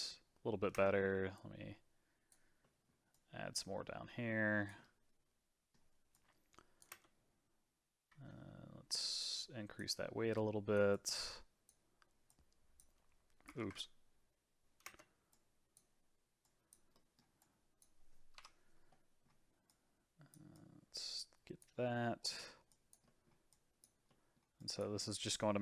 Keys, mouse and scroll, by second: 0.0 middle click, 0.7 space, 1.4-2.6 drag, 2.6 middle click, 3.1-4.8 drag, 4.8-6.1 middle drag, 6.1 click, 6.9 space, 9.2-10.4 drag, 10.9-13.6 drag, 13.6 ctrl+z, 14.8 space, 15.3-16.9 drag, 16.9 middle click, 17.4 click, 18.3 KP_Divide, 18.9 middle click, 19.7-21.7 drag, 21.7 scroll down 2, 22.0 middle click, 22.7 click, 23.0 middle click, 23.5 click, 24.1 middle click, 24.6 click, 25.0 middle click.